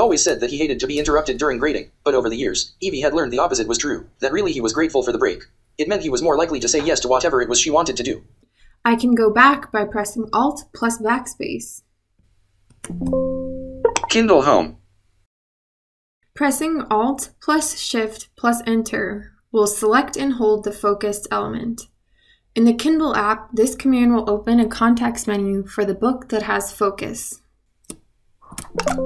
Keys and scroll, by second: 10.1 alt+BackSpace, 22.0 alt+shift+Return.